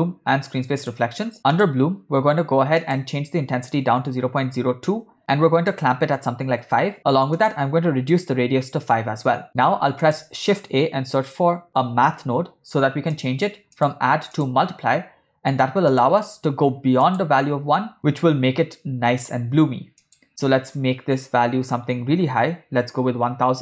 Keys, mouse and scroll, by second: 0.0 click, 1.2 click, 1.7 click, 2.9-5.1 drag, 5.8-6.8 drag, 7.5-8.9 drag, 9.4 middle click, 9.7 shift+a, 14.5 click, 16.0-17.2 drag, 20.1-23.6 drag.